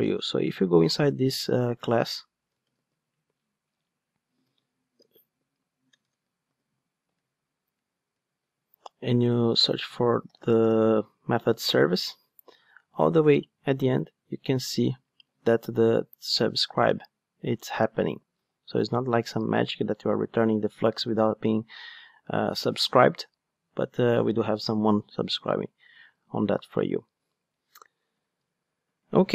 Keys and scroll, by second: 2.8 super+v, 3.7 super+v, 4.9 super+z, 8.1 super+v, 9.8 super+f.